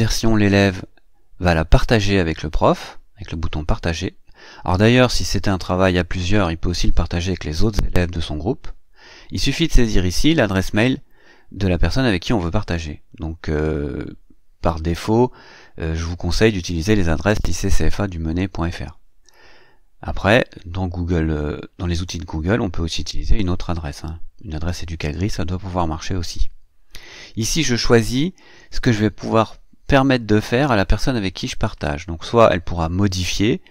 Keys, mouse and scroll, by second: 3.4 click, 27.7 click.